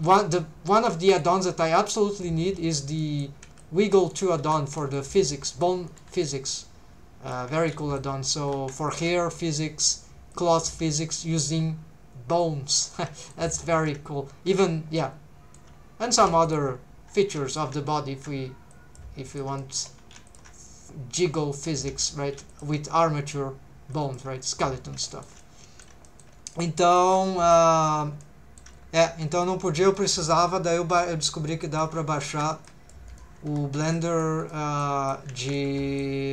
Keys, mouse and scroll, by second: 0.0 click, 0.2 g, 0.8 shift+click, 1.1 click, 1.7 middle click, 2.2 middle click, 3.0 middle click, 3.5 c, 4.0 right click, 4.1 middle click, 4.4 3, 4.8 c, 5.9 right click, 6.3 click, 7.5 alt+a, 7.8 middle click, 8.4 3, 8.9 alt+shift+click, 10.3 click, 12.9 middle click, 15.0 middle click, 16.5 alt+shift+click, 17.2 alt+a, 17.5 alt+shift+click, 18.7 click, 19.3 shift+middle click, 19.6 middle click, 20.3 alt+shift+click, 20.8 scroll down 1, 21.6 click, 22.2 alt+a, 22.5 alt+shift+click, 23.3 scroll down 1, 23.9 right click, 23.9 click, 24.4 middle click, 24.8 scroll up 2, 25.1 shift+middle click, 25.4 middle click, 26.1 shift+middle click, 26.4 scroll down 1, 26.5 middle click, 27.2 shift+middle click, 28.0 scroll up 2, 28.2 middle click, 28.8-29.3 scroll down 1, 29.3 c, 29.8 right click, 31.6 shift+middle click, 32.2 alt+a, 32.5 c, 33.1 right click, 33.5 3, 33.8 c, 34.4 right click, 34.8 click, 35.4 alt+a, 35.5 middle click.